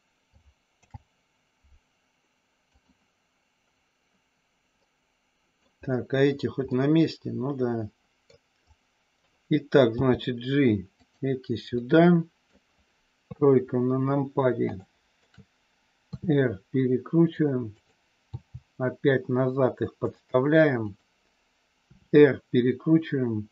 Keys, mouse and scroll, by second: 0.7 alt+p, 4.8 middle click, 6.6-8.3 middle drag, 8.6 click, 9.8 g, 11.0 click, 11.7 scroll up 1, 11.8 middle click, 13.2 KP_3, 14.7 shift+middle click, 16.1 r, 17.7 click, 18.3 g, 20.0 click, 20.8 click, 21.8 r.